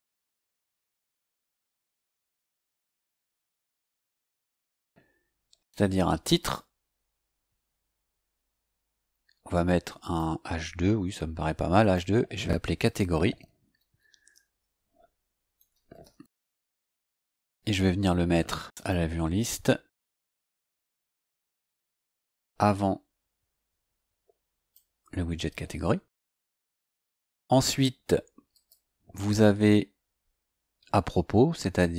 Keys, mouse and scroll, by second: 3.9 click, 6.3 click, 10.0 click, 11.7 click, 12.5-16.7 typing, 18.7 click, 22.3-24.9 drag, 26.6 scroll down 2, 28.5 click, 29.5-30.2 scroll down 4, 31.1-31.8 scroll down 4.